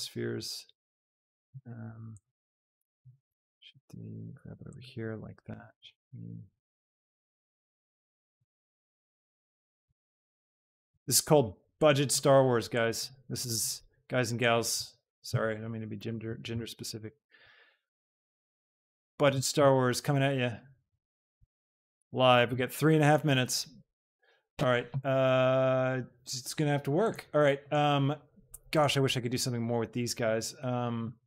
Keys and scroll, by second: 3.4 shift+d, 5.6 d, 8.6 shift+d, 10.0 d, 15.2 shift+d, 18.5 s, 19.6 shift+d, 22.5 g, 24.0 a.